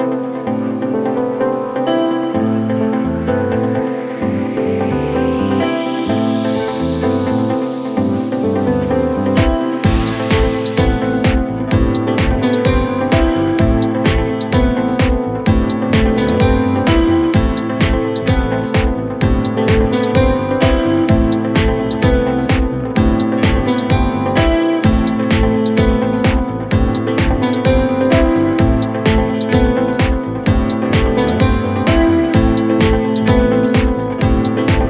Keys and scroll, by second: 14.3 Delete.